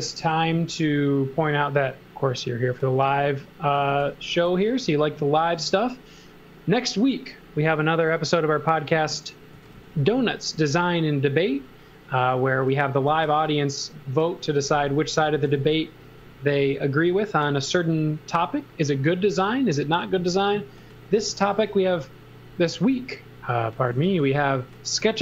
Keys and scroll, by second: 0.0-0.2 typing, 3.4-4.5 typing, 9.3-10.3 typing, 13.1 space, 14.5 x, 14.9 v, 16.6 s, 20.1 space, 21.2 s, 23.5-24.9 typing.